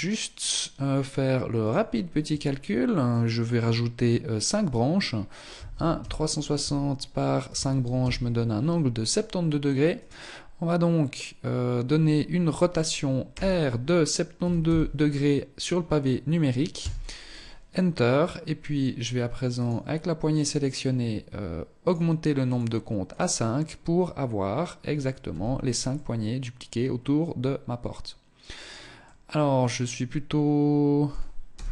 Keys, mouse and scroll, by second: 12.5 r, 17.0-17.9 scroll up 1, 18.9 right click, 21.1 click, 21.3 click, 22.3 click, 24.5 z, 25.2 middle click, 28.3 middle click, 30.4 scroll up 1, 30.8 KP_0, 31.5-31.7 scroll down 5.